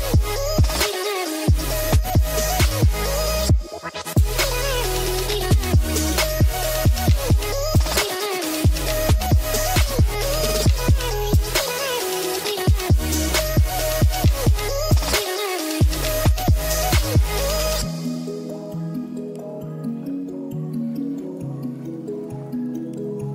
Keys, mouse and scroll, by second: 1.2-4.1 drag, 4.5 click, 7.5 click, 11.0 click, 11.7 ctrl+s, 15.4 click, 15.5-15.8 drag, 16.5 middle click, 16.8 shift+a, 22.8-23.3 drag.